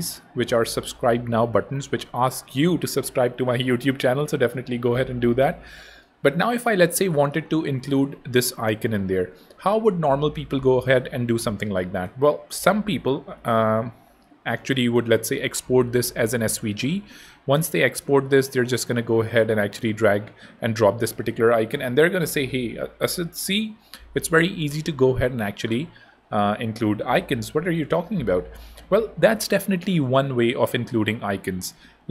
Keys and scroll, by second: 16.1 Home, 17.2 super+Tab, 30.2 super+d.